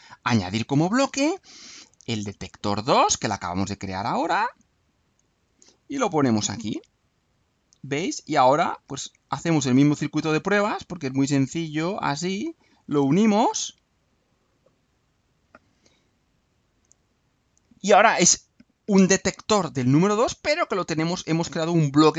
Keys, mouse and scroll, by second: 0.2 click, 2.1 click, 4.4 click, 6.6 click, 7.8-9.0 drag, 9.5 click, 11.0 click, 12.3-13.4 drag, 14.3-15.4 drag, 16.2 click, 17.2 scroll up 1, 21.0 right click.